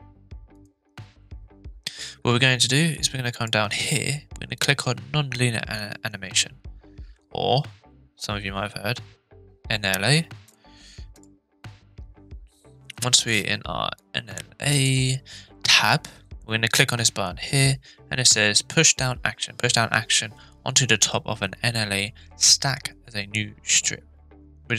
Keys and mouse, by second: 0.5 click, 3.4-4.2 drag, 4.8 click, 14.0-14.8 drag.